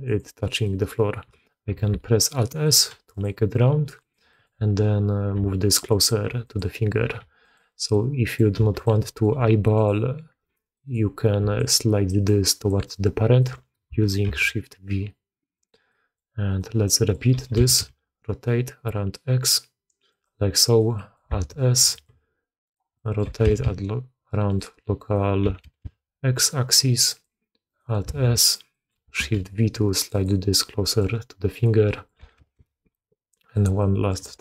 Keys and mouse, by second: 0.5 click, 1.8 alt+s, 2.5 drag, 2.8 g, 3.6 g, 4.2 click, 5.3 g, 6.2 g, 7.8-8.3 drag, 8.9 drag, 9.2 g, 10.6 click, 11.3-14.2 typing, 11.5 click, 12.2 click, 12.8-13.3 drag, 15.8 drag, 16.4 click, 16.8 drag, 17.2 r, 20.9 drag, 21.4 alt+s, 21.8 shift+click, 22.6 click, 22.9 drag, 23.2 r, 24.9-25.4 drag, 25.4 r, 28.1 alt+s, 28.3 click, 28.6 click, 29.1 shift+v, 30.7 drag, 31.5 click, 31.8 drag, 32.2 r, 33.7-34.1 drag, 34.2 r.